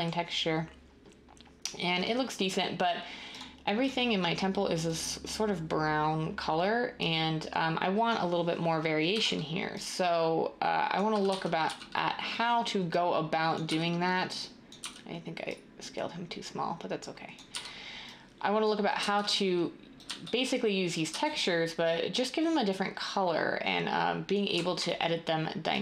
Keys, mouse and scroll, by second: 9.1 e, 11.4-11.8 typing, 13.6 w, 14.8 r, 18.6-19.1 typing, 20.2 d, 21.2 d, 24.5 a.